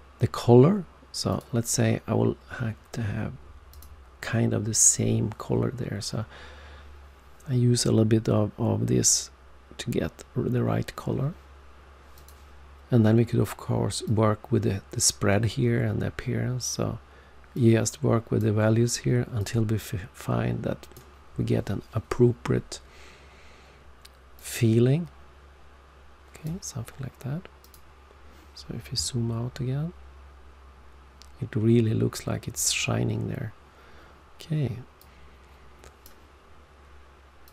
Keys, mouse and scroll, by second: 1.2 click, 3.6 click, 12.1 click, 14.0 click, 24.3 click, 27.6 click, 27.7 click, 29.0-29.6 alt+scroll down 1, 34.9 click, 37.4 click.